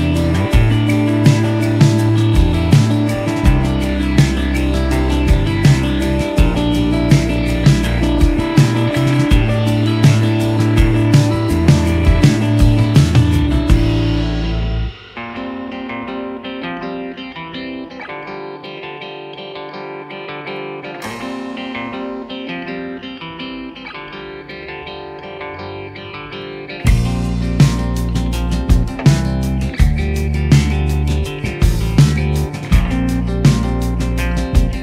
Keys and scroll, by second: 28.7 ctrl+z, 34.7 ctrl+z.